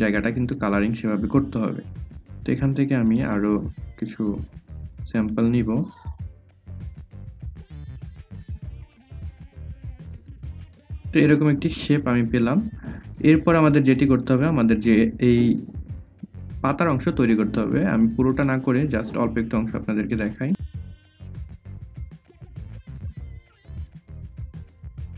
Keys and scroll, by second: 0.8 a, 3.2 v, 4.7 i, 6.0-10.4 typing, 21.3 ctrl+c, 21.4 ctrl+f, 21.6 ctrl+z, 21.8 ctrl+c, 22.2 ctrl+f.